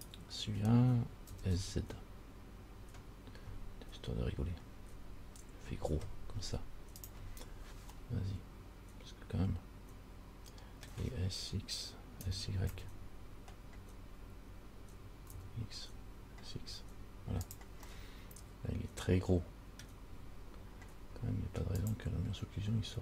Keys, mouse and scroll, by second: 0.2 right click, 1.5 s, 8.2 middle click, 12.4 s, 18.1 middle click, 22.0 click.